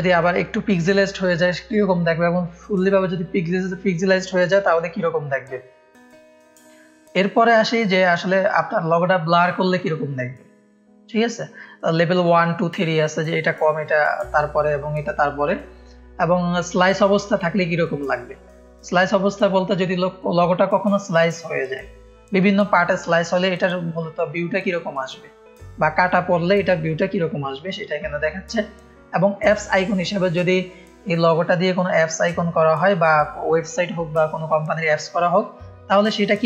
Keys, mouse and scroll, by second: 5.2 middle click, 5.2 scroll down 2, 5.9 middle click, 5.9-6.3 scroll down 2, 8.2 click, 11.2-11.6 scroll down 1, 15.4-16.1 scroll down 1, 27.2 scroll down 1, 28.6 scroll down 1, 29.8 click, 30.4 click, 31.3 scroll down 1.